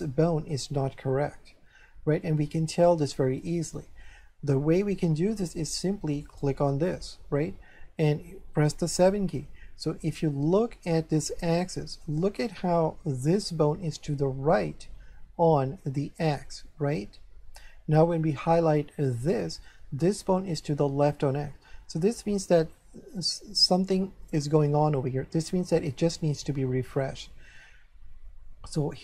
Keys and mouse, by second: 2.2 middle click, 6.3 right click, 8.8 7, 10.9 shift+middle click, 12.7 shift+middle click, 15.5 shift+middle click, 19.2 right click, 24.2 shift+middle click.